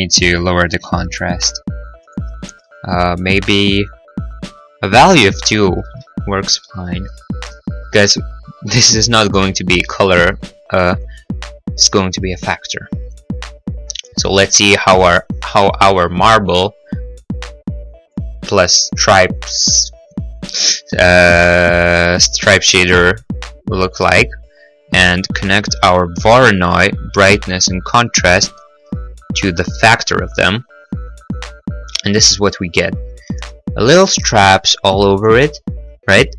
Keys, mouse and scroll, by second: 0.7 Return, 0.7 2, 2.4 click, 2.4 1, 2.4 Return, 5.9 Return, 5.9 click, 5.9 2, 6.9 middle click, 7.4 middle click, 7.7-8.1 scroll, 8.4 scroll, 10.2 middle click, 14.5-14.9 scroll, 16.4 click, 18.9 middle click, 18.9-20.0 scroll, 19.2 middle click, 20.0 middle click, 20.0 scroll, 20.2 middle click, 20.9 middle click, 21.9 middle click, 24.7 scroll, 26.8 click, 30.0 middle click, 30.0-30.4 scroll, 30.1 middle click, 30.2 middle click, 30.7 middle click, 30.9-31.9 scroll, 31.9-32.6 scroll, 33.0 scroll.